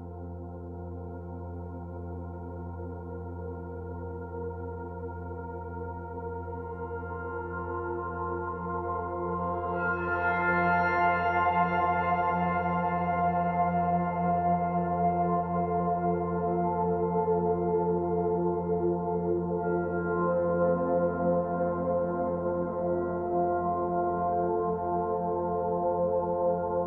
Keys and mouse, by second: 1.1 Escape, 3.2 s, 3.9 Escape, 6.4 alt+click, 8.4 click, 9.5 click, 10.9 Tab, 11.4-12.2 alt+drag, 13.8-15.6 drag, 16.5-17.4 drag, 19.1-19.7 drag, 20.1-20.7 drag, 20.8-21.7 drag, 21.0-26.8 typing.